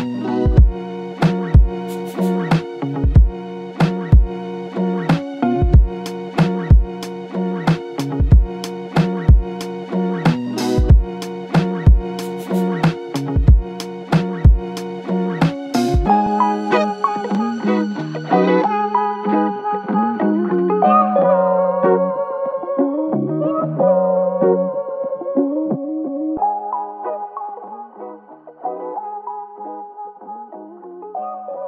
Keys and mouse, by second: 3.3 double click, 4.5-5.8 typing, 8.6-9.4 typing, 9.7 alt+click, 13.3 double click, 15.9 alt+click, 17.2 alt+click, 18.8 ctrl+click, 22.0 ctrl+click, 23.3 ctrl+click, 26.0 w, 26.6 alt+click.